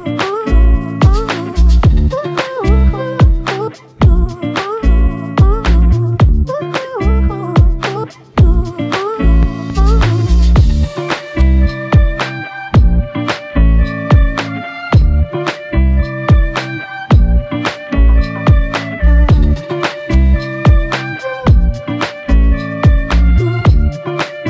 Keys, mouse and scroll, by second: 1.2 shift+click, 3.0 shift+click, 4.9 shift+click, 15.4 shift+click, 18.0 shift+click, 23.9 double click.